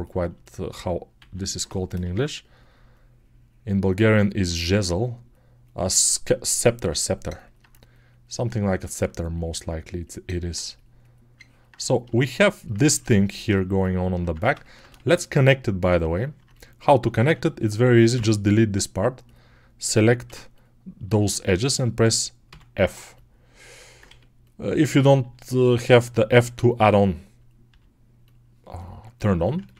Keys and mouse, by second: 1.9 g, 8.5-12.1 alt+drag, 12.1-15.0 ctrl+alt+right drag, 14.0 Tab, 15.0-16.4 alt+drag, 16.4 middle click, 17.1 3, 17.3 click, 18.0-19.1 middle drag, 18.0 x, 19.1 right click, 19.2-26.5 middle drag, 20.1 2, 22.3 f, 23.9 1, 25.1 g, 26.5 click, 27.0-28.6 middle drag, 27.5 g, 28.6 click, 28.9-29.7 alt+middle drag.